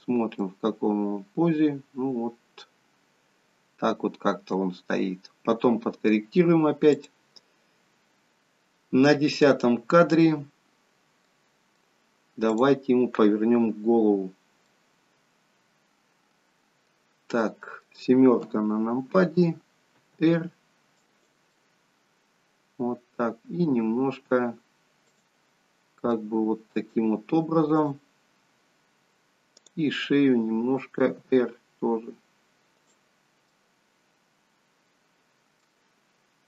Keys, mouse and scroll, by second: 0.4 middle click, 6.9 click, 11.3 middle click, 12.6 click, 14.6 middle click, 17.6 middle click, 18.4 KP_7, 20.1 r, 21.6 middle click, 23.4 r, 26.0 middle click, 27.7 click, 29.6 click, 31.1 r, 33.4 middle click.